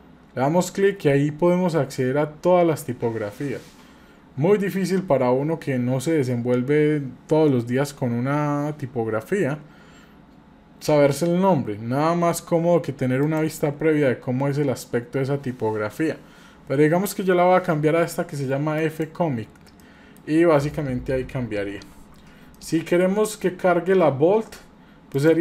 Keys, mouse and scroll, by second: 19.8 middle click, 20.4-20.8 scroll up 3, 21.0-21.7 scroll down 3, 22.5-23.2 shift+middle drag, 25.2 drag.